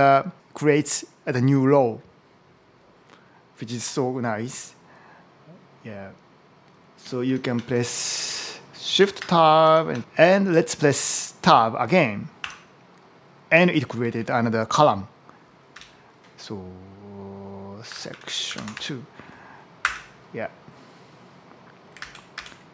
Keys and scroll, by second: 7.1 shift+Tab, 7.6 shift+Tab, 8.3 shift+Tab, 8.8 shift+Tab, 9.4 Tab, 12.2 Tab, 13.3 Left, 15.6 Left, 17.5-19.2 typing, 19.6 Return, 21.8 alt+Right.